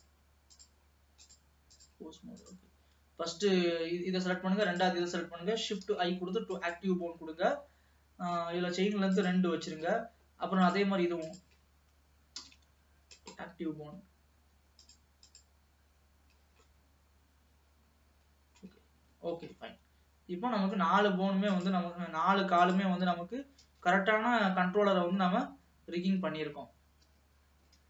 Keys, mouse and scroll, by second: 0.5 click, 1.3-3.2 drag, 4.7 shift+click, 5.8 shift+i, 9.2-11.2 drag, 11.3 shift+click, 12.4 shift+i, 14.8-16.7 drag, 16.7-18.8 middle drag, 18.8-19.4 scroll down 3, 19.4 ctrl+s, 19.8-21.5 middle drag, 21.5 click, 22.1-22.7 scroll up 1, 22.7 click, 24.0 g.